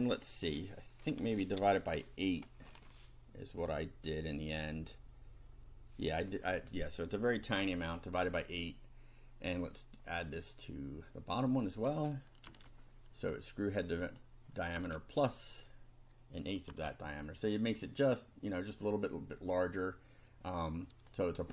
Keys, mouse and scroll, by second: 7.6 8, 10.2-11.8 drag, 12.5 ctrl+c, 14.1 click, 14.8 ctrl+v, 16.7 F5, 17.3-21.2 drag.